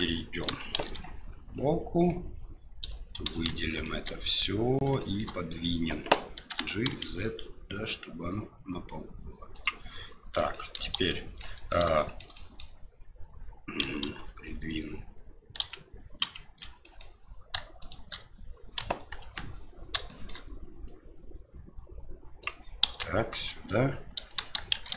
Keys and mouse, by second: 0.7 shift+z, 3.7 shift+right click, 5.0 shift+middle drag, 6.5 g, 10.6 middle click, 10.9 shift+z, 11.5 middle drag, 12.0 shift+middle drag, 12.4 middle drag, 14.0 ctrl+z, 15.6 ctrl+z, 16.6 ctrl+z, 16.8 middle drag, 17.8 right click, 18.8 KP_1, 19.2 KP_3, 20.1 shift+middle drag, 20.9-22.4 drag, 22.8 KP_7, 24.7 shift+z.